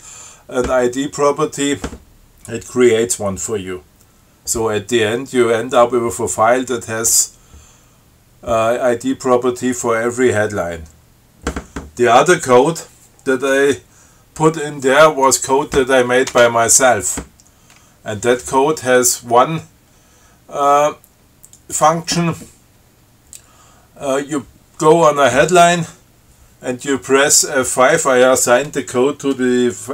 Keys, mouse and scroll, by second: 13.1-14.1 scroll down 6, 15.5 click, 16.6 Return, 21.8 click.